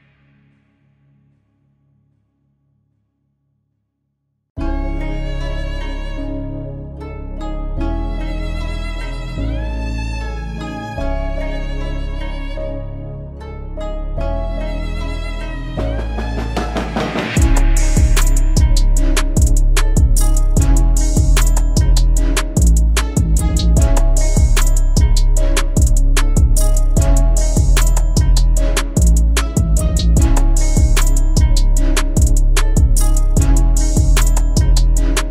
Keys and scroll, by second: 27.0 Down, 28.0 Up, 29.0 Down, 29.5 Down, 30.2 Up, 32.0 Down, 32.4 Down, 33.0 Down, 33.5 Down, 34.0 Down, 34.7 Up.